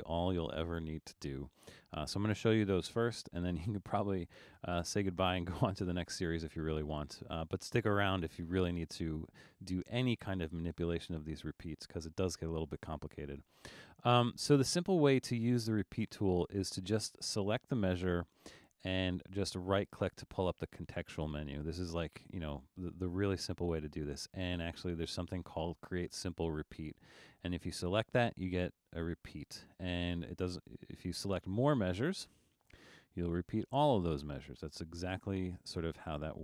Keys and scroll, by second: 29.9 super+z.